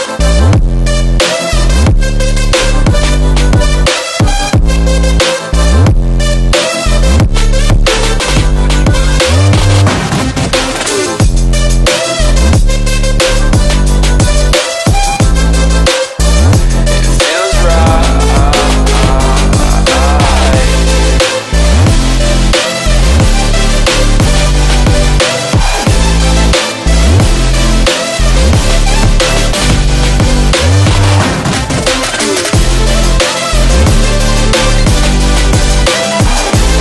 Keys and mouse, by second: 0.7-1.3 shift+drag, 2.6-4.7 drag, 5.2 space, 5.3 click, 5.5 space, 6.1-8.6 drag, 13.9-14.7 space, 15.1 click, 16.6 shift+click, 16.9 right click, 17.7 click, 20.8 click, 21.1 space, 21.2 click, 21.4 space, 22.2 ctrl+-, 22.8 ctrl+=, 23.5-26.3 typing, 23.6 click, 24.6 click, 25.3 ctrl+=, 26.1 click, 26.6-29.1 drag.